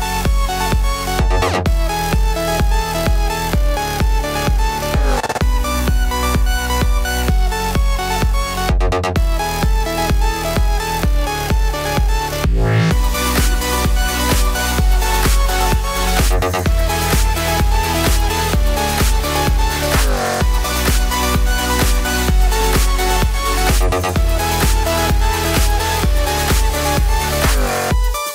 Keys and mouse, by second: 0.0-2.0 typing, 0.7-3.3 right drag, 2.8 ctrl+r, 3.3-10.7 ctrl+middle drag, 3.4 ctrl+b, 4.1 2, 4.9 Delete, 5.2 Delete, 5.5 Delete, 5.8 Delete, 6.1 click, 6.4 Delete, 6.6 e, 8.1 e, 9.0 r, 9.2 r, 9.2 g, 10.0 shift+click, 10.3 s, 10.7-11.9 drag, 10.9 s, 11.9-17.2 middle drag, 12.0-13.7 typing, 15.9-19.4 typing, 17.2-24.7 right drag, 20.7 l, 21.0 shift+d, 21.6 r, 23.0-28.3 typing, 24.7-26.5 middle drag, 26.5 click, 26.6-28.3 middle drag.